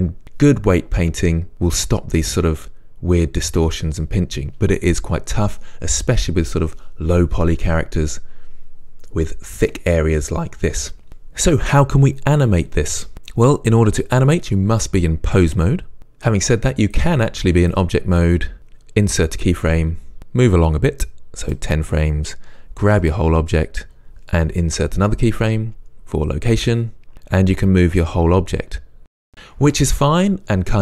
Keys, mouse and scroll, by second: 11.1-16.8 shift+middle drag, 16.8-21.2 drag, 19.5 i, 21.2-24.0 right drag, 23.4 g, 24.0 click, 25.3 i, 27.6-30.8 right drag.